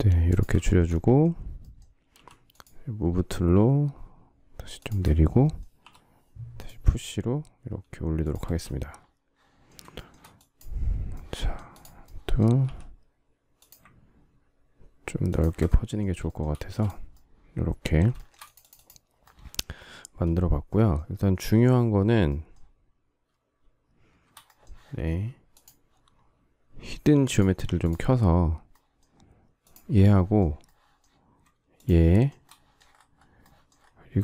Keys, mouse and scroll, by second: 0.2 ctrl+click, 0.7 shift+middle click, 2.0 m, 4.7 shift+click, 5.8 p, 8.4 space, 9.9 shift+middle click, 12.6 s, 15.2 ctrl+click, 16.2 shift+middle click, 16.5 space, 18.1 shift+middle click, 19.9 shift+middle click, 31.7 shift+click, 32.0 shift+middle click, 32.2 shift+double middle click.